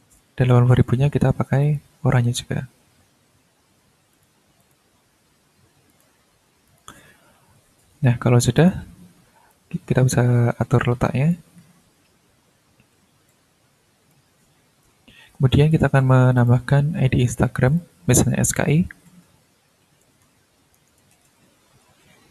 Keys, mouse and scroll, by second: 0.4 click, 1.6 click, 4.1 click, 4.6 click, 5.9 click, 6.7 click, 8.5 click, 9.5-11.5 drag, 11.7-12.4 ctrl+scroll down 2, 12.6 ctrl+scroll up 2, 13.3 ctrl+click, 16.3 click, 16.7 scroll down 2, 17.7 click, 19.0-21.7 typing, 22.2 ctrl+shift+a.